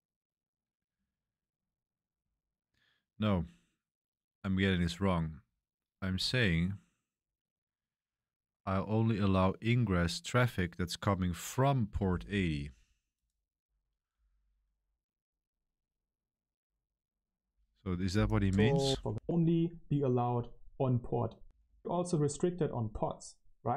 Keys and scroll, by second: 18.8 Left, 19.0 Left, 21.4 BackSpace, 21.5 BackSpace.